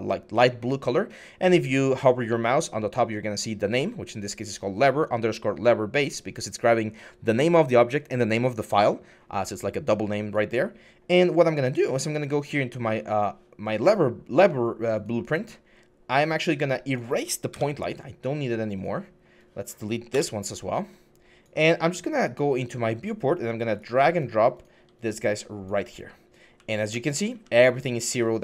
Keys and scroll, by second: 17.3 Delete, 19.9 Delete, 26.3-27.9 typing.